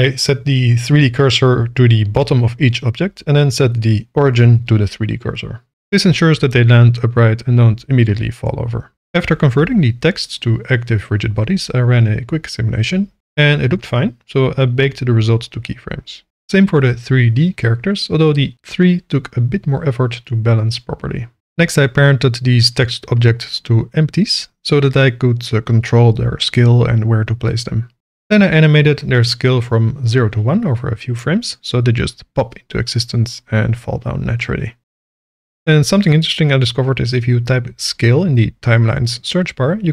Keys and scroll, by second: 2.5 shift+s, 2.9 Tab, 5.0 Tab, 7.3 Tab, 23.3 ctrl+p, 25.8 g, 28.2 z, 28.6 shift+s, 28.6 k, 33.1 s, 34.1 KP_0, 35.5 k, 37.0 space, 38.4 s, 38.5 c, 38.6 e.